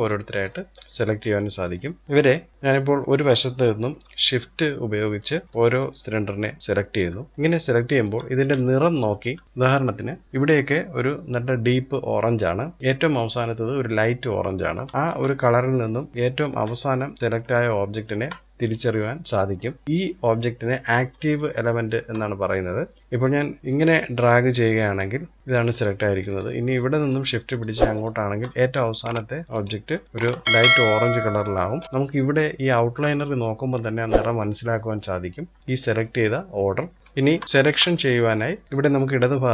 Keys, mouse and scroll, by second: 0.4 middle click, 1.0-1.3 scroll up 1, 1.3 shift+middle click, 2.0 click, 4.7 shift+click, 5.4 shift+click, 6.2 shift+click, 6.8-7.2 scroll up 1, 7.2 shift+middle click, 7.8-8.2 scroll down 1, 8.2-10.2 shift+middle drag, 14.6-17.0 shift+middle drag, 17.0 scroll up 1, 17.2 shift+middle click, 18.0-18.6 scroll down 2, 18.6-23.2 middle drag, 23.4 click, 25.8 click, 26.5 shift+click, 27.0 shift+click, 27.5 shift+click, 28.9 middle click, 29.4 scroll up 3, 29.7-31.8 shift+middle drag, 36.4-36.7 scroll down 1, 36.9 shift+middle click, 37.0 scroll up 1, 37.2 scroll down 1, 37.4-39.5 shift+middle drag.